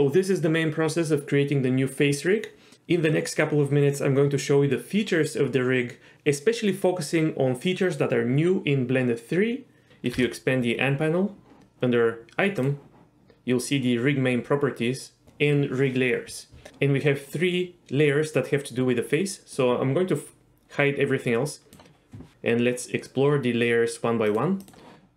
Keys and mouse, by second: 9.9 Escape, 10.1 n, 19.6-21.7 drag, 24.3 click, 24.6 click.